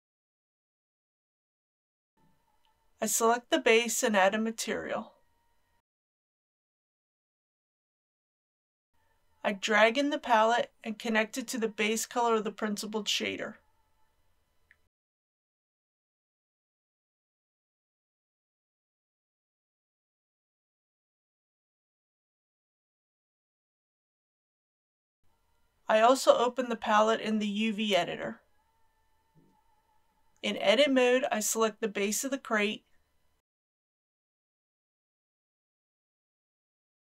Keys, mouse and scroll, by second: 2.6 click, 5.5-7.0 typing, 7.6 shift+middle click, 8.6 scroll up 1, 10.0-28.7 drag, 29.8 Tab, 31.1 a, 33.4 3.